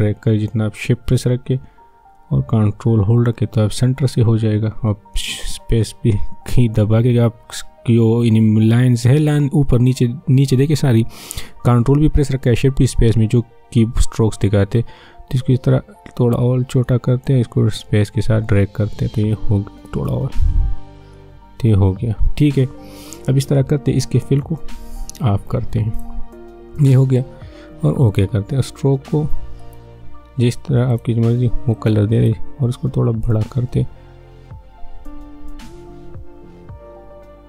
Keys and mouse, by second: 5.2 ctrl+shift+space, 7.5 ctrl+shift+space, 7.7 ctrl+shift+space, 11.0 ctrl+shift+space, 24.3-37.4 drag.